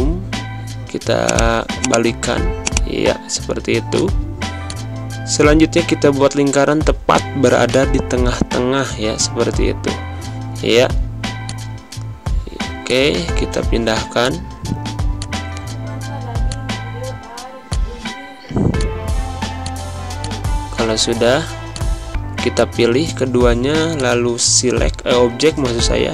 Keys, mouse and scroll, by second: 3.5 z, 3.9 click, 7.7 click, 11.4 click, 18.2 z, 18.7 click, 20.2 click, 21.2 v, 21.6 click.